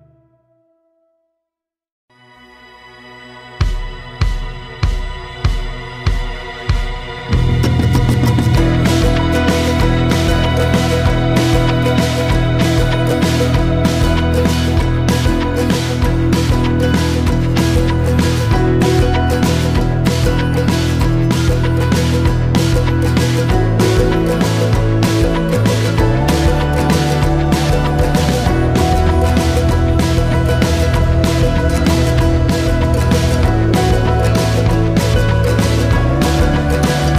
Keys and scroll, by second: 0.5 Return, 12.2 m, 15.5-21.0 typing, 21.0 Return, 25.8 Delete.